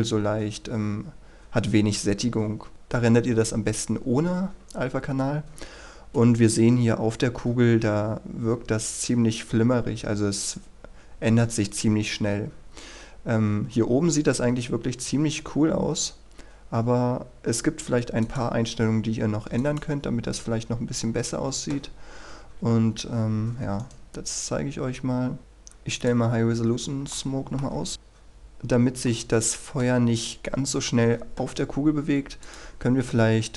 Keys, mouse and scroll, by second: 20.2 click, 22.6 Escape, 23.9 right click, 25.4 click, 27.2 middle click, 27.9 KP_Decimal, 28.1-29.1 scroll up 1, 29.1-30.7 middle drag, 32.5 click.